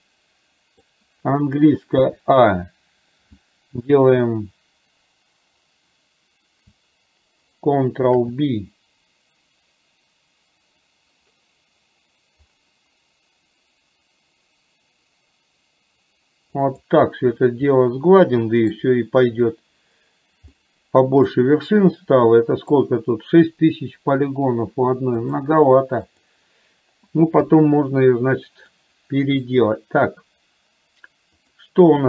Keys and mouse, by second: 0.1 middle click, 8.1 ctrl+b, 17.8-18.8 middle drag, 20.6 middle click, 22.0 middle click, 25.3-26.4 drag, 27.5 KP_1, 28.8 middle click.